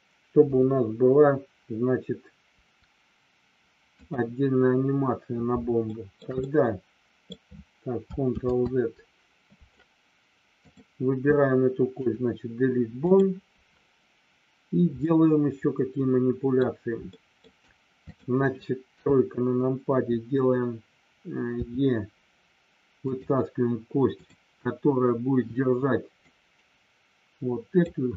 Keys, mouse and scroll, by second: 5.9 shift+middle click, 6.3 middle click, 8.2 ctrl+z, 10.6 click, 11.9 Delete, 15.0-16.5 middle drag, 17.1 shift+middle click, 18.1 click, 18.9 KP_3, 21.6 e, 23.0 click, 24.1 click, 26.2-27.7 drag.